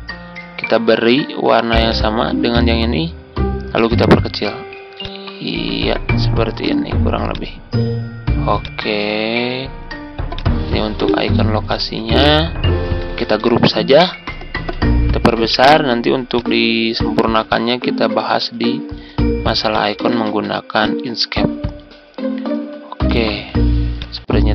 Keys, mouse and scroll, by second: 1.8 click, 7.3 click, 10.3 click, 11.0 shift+click, 11.6 shift+click, 13.4 ctrl+g, 14.0-14.4 ctrl+scroll down 1, 16.2 click, 17.4 ctrl+click, 19.6 shift+click, 19.9-20.2 typing, 21.2 ctrl+scroll down 1, 22.0 ctrl+scroll down 1, 23.9-24.5 drag.